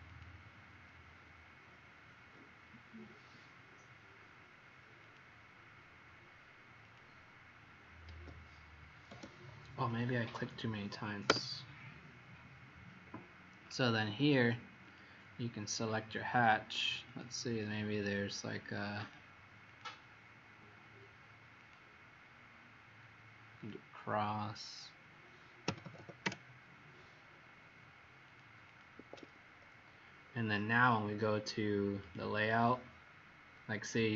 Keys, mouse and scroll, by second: 0.0 click, 8.1 Escape, 9.8 click, 11.2 Return, 14.9 click, 17.4 click, 18.9 click, 19.6 click, 21.5 click, 25.6 KP_5, 25.8 KP_0, 25.9 KP_0, 26.2 Return, 28.3 click, 28.7 click, 28.9 Escape, 29.1 Escape, 32.0 click, 33.7-34.1 scroll up 1.